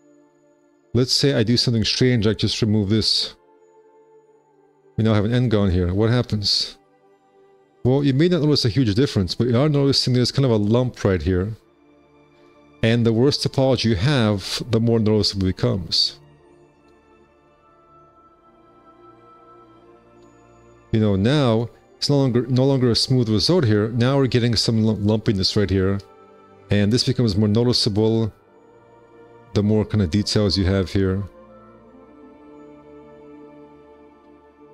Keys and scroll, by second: 0.2 `, 1.0 2, 4.8 4, 6.0 space, 6.6 F4, 8.2 4, 10.5 q, 13.1 F4, 16.6 space, 17.2 1, 19.9 shift+w, 20.0 space, 20.5 1, 22.9 F4, 26.7 F4, 29.5 `, 30.2 1, 32.1 space, 32.7 F4.